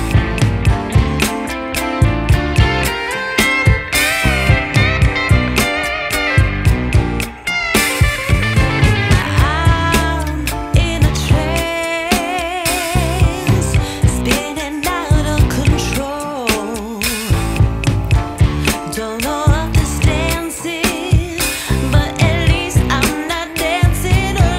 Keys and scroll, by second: 0.0 Escape, 22.4 5, 22.7 Return, 23.9 Escape.